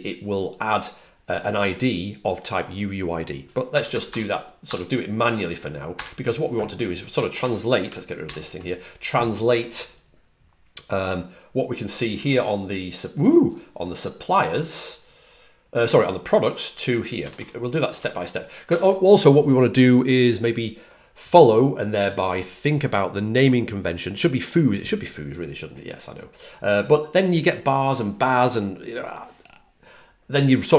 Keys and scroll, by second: 3.3-5.1 typing, 5.2 Right, 5.4 Right, 5.8 Left, 17.6-18.6 typing, 18.7 Right.